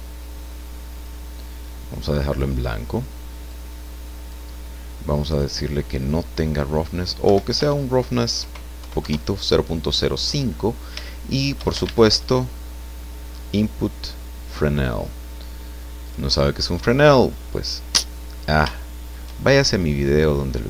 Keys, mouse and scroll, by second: 0.9 click, 2.3 click, 3.5-4.5 drag, 5.3 click, 7.2 Right, 8.1 BackSpace, 8.4 KP_0, 8.8 KP_5, 9.0 KP_Enter, 10.7-11.0 scroll down 3, 11.1 shift+click, 11.8 shift+a, 14.4 click, 16.1 click, 18.7 shift+click, 19.4-19.9 shift+scroll up 3, 20.0 scroll down 2, 20.3-20.6 drag.